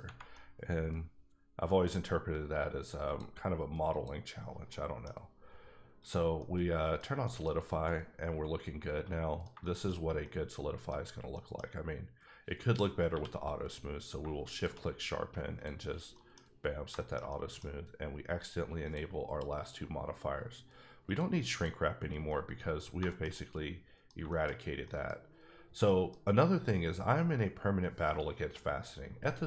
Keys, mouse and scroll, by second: 0.3 middle click, 3.0 click, 3.9 click, 4.7 middle click, 6.0 click, 6.4 middle click, 7.2 middle click, 7.5-7.8 scroll up 2, 7.8 middle click, 9.9-10.2 scroll up 2, 10.2 middle click, 10.5-10.9 scroll down 1, 11.1 scroll down 1, 11.3 middle click, 11.7-13.1 scroll up 1, 13.1 q, 14.5 shift+click, 15.8-16.1 scroll down 1, 16.1 middle click, 16.5-16.8 scroll up 3, 16.9 shift+middle click, 17.5 scroll down 1, 18.8 click, 19.6 click, 21.5 click, 22.3 middle click, 22.8 scroll down 3, 23.1 shift+middle click, 24.2 shift+middle click, 24.5-24.8 scroll up 2, 24.8 middle click, 25.5-25.8 scroll up 2, 25.8 middle click.